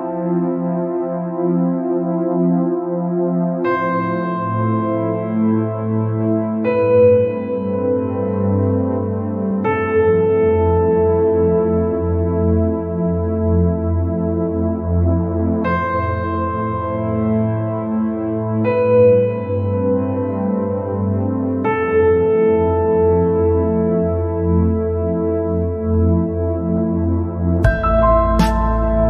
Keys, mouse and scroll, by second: 0.5 shift+click, 1.3 shift+click, 1.6 scroll down 3, 1.8 middle click, 2.6-3.4 scroll up 2, 4.7 scroll down 1, 4.9-6.9 middle drag, 6.9 shift+click, 7.6 shift+click, 8.2 shift+click, 8.8 shift+click, 9.3 shift+click, 9.6 scroll down 3, 9.8 middle click, 10.5-11.4 scroll up 3, 11.4-11.9 scroll up 1, 11.9 shift+Left, 12.4 shift+Left, 12.9 shift+Left, 13.3 shift+Left, 13.6-14.1 scroll down 2, 14.4 scroll down 2, 14.6 middle click, 15.4-15.9 scroll up 2, 19.1 scroll down 1, 19.2-20.2 middle drag, 20.2 scroll up 3, 22.9-23.4 scroll down 3, 23.4-23.7 scroll up 2, 23.7 scroll down 1, 23.8 middle click, 24.7 scroll up 1, 26.5 shift+Left, 27.1 shift+Left, 27.4 scroll down 1, 27.6-29.0 middle drag.